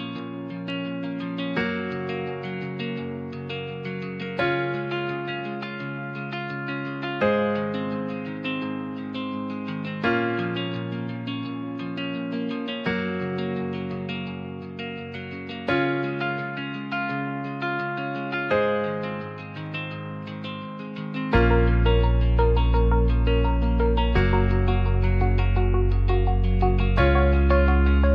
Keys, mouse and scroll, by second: 0.4 r, 0.7 KP_9, 0.7 KP_0, 0.9 KP_Enter, 1.3 s, 2.2 shift+middle click, 2.6 g, 3.2 click, 4.2 ctrl+a, 4.6 middle click, 5.6 shift+click, 6.9 q, 9.5 click, 10.3-11.4 drag, 12.2 shift+click, 13.1 shift+click, 14.0-16.2 shift+drag, 18.7 click, 21.4 click, 22.9-23.9 shift+drag, 24.1 click, 24.4 ctrl+middle drag, 25.2 ctrl+s, 25.3 middle click, 26.9 middle click, 27.3 shift+middle click, 27.6 alt+z.